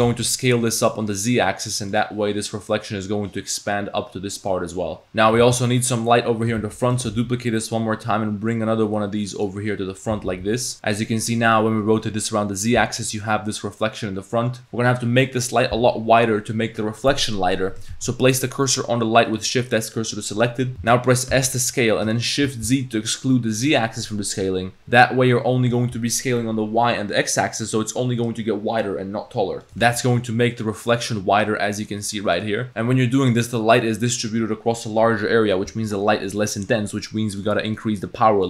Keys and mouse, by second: 5.4 shift+s, 6.6 shift+d, 7.1 r, 10.5 g, 10.7 r, 18.0 shift+s, 21.3 s, 29.7 s, 37.3-38.4 drag.